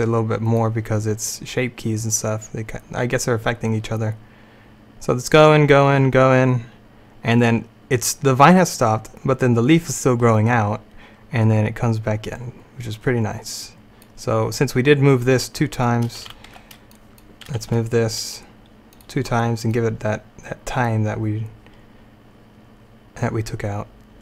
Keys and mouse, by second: 2.2-4.1 drag, 16.3 q, 16.3 a, 16.6 b, 17.7 g.